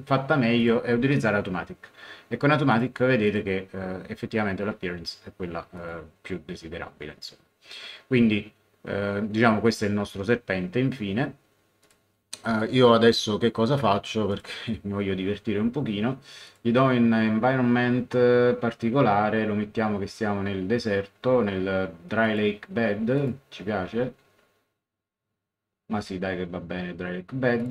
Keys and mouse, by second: 0.6 click, 2.7 click, 5.7 click, 11.8 click, 14.3 click, 16.4 click, 22.2 click, 27.6 click.